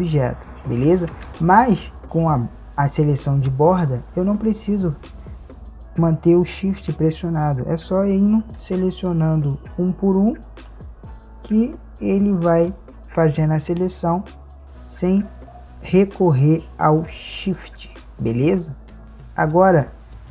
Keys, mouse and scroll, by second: 1.2 a, 6.6 click, 8.4 b, 10.7 b.